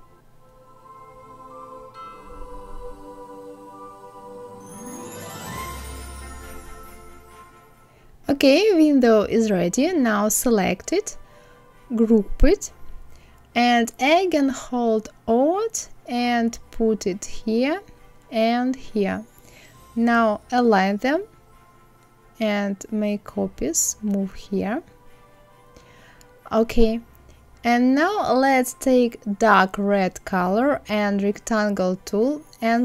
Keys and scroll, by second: 1.3 ctrl+z, 2.5 ctrl+c, 20.3 Left.